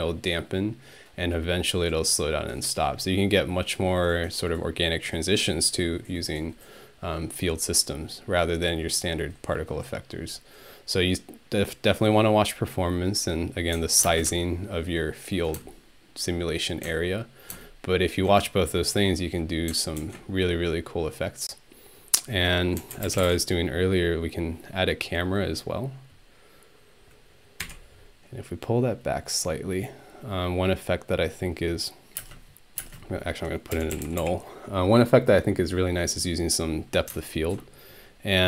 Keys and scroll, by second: 14.1 ctrl+space, 22.6-24.1 typing, 27.6 6, 32.2-34.7 typing.